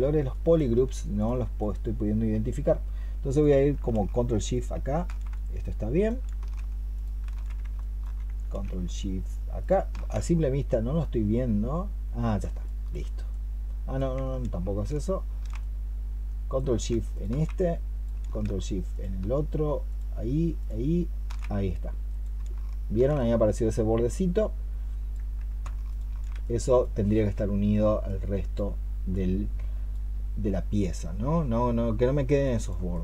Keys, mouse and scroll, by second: 0.2 alt+click, 1.4 double click, 4.4 ctrl+shift+click, 6.8 ctrl+shift+click, 7.6 alt+click, 9.4 ctrl+shift+click, 12.5 alt+click, 17.0 ctrl+shift+click, 18.8 ctrl+shift+click, 19.7 ctrl+shift+click, 23.0 ctrl+shift+click, 25.7 ctrl+shift+click, 32.8 double click.